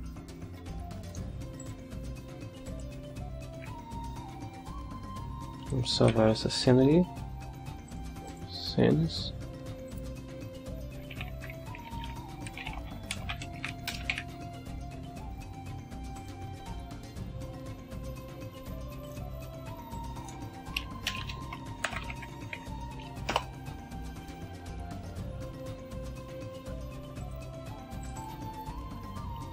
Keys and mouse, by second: 1.6 click, 2.6 click, 6.1 ctrl+s, 7.9 click, 8.2 click, 9.8 click, 10.8-14.1 typing, 16.2 click, 19.0 click, 19.9 click, 21.1 Delete, 21.6-23.1 typing, 23.3 Return, 26.0 alt+Tab, 27.2 click, 28.0 click, 28.5 click.